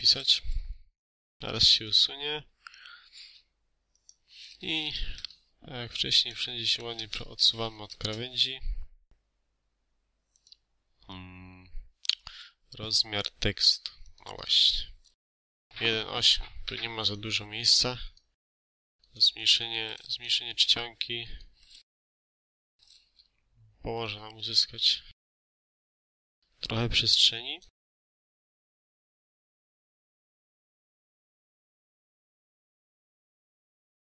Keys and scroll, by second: 0.0-0.1 typing, 4.7 4, 4.7 0, 4.9 Return, 7.2 BackSpace, 7.7 6, 7.9 Return, 8.7 Escape, 15.3 ctrl+a, 21.9 1, 22.2 8, 22.5 Return, 24.3 BackSpace, 30.2 Escape, 31.5-32.7 typing, 32.2 Return, 32.5 ctrl+alt+e, 32.8 ctrl+a, 34.0 Escape.